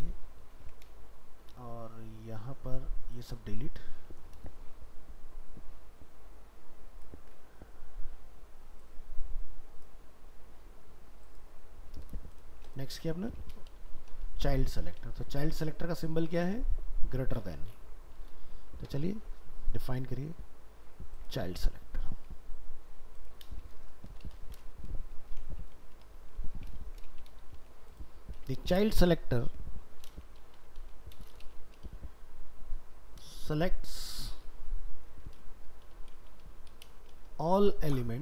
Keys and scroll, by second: 21.8 ctrl+s, 26.8 ctrl+s, 29.2 ctrl+shift+Right.